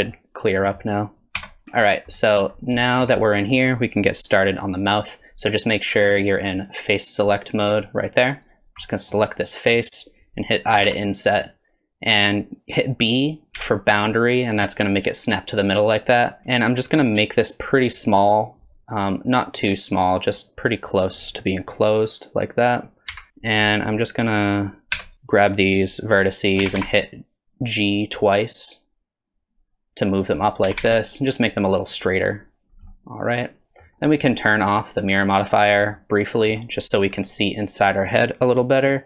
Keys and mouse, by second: 0.0 drag, 0.5 drag, 1.4 Tab, 2.2 middle click, 2.8 shift+middle click, 3.2 middle click, 6.6 click, 8.5 click, 8.8 middle click, 9.4 middle click, 10.9 i, 16.4 i, 23.1 KP_1, 24.9 1, 26.6 g, 30.6 g, 32.9 middle click, 35.6 click, 36.0 middle click, 37.2 middle click.